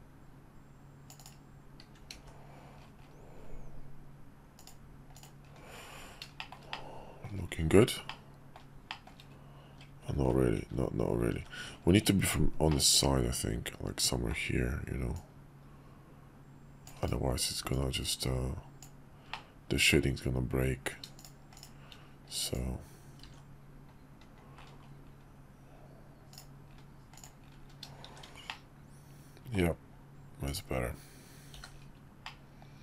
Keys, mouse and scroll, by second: 2.1 alt+x, 4.6 click, 5.1 click, 6.4 shift+middle click, 6.7-7.2 middle drag, 8.1-8.6 middle drag, 8.9 shift+middle drag, 10.2 ctrl+z, 11.6 ctrl+z, 12.7-14.3 middle drag, 15.1-17.2 drag, 17.7-21.4 drag, 21.5 shift+click, 22.4 click, 23.2 alt+x, 26.7-27.8 middle drag, 28.1 shift+2, 28.5-29.6 middle drag, 30.4 click, 31.5 h, 32.2-32.8 middle drag.